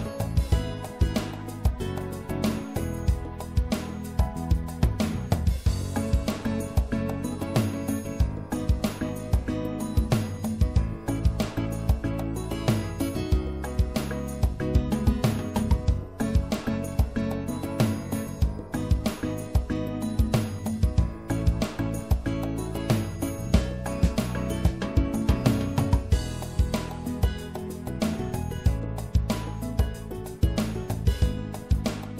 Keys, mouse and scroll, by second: 0.5-2.4 right drag, 2.8-4.9 drag, 2.8-4.3 right drag, 4.9-6.2 middle drag, 8.6-11.2 right drag, 9.3-10.3 drag, 11.2-12.6 middle drag, 15.2 ctrl+z, 16.1 ctrl+z, 17.3 click, 17.5-19.2 middle drag, 20.2-26.5 drag, 21.0-23.6 right drag, 27.1-28.2 middle drag, 28.2 right click, 29.2 f, 31.2 right click, 31.9 middle click.